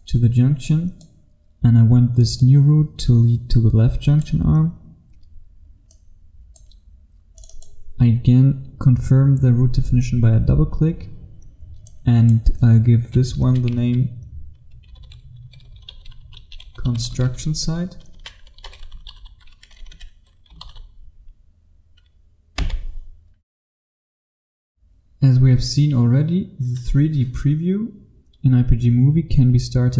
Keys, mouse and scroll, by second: 0.3-0.8 scroll up 1, 0.8 click, 5.3-5.9 scroll down 1, 5.9 click, 13.5 BackSpace, 14.9-21.2 typing, 22.6 Return, 23.8 F1.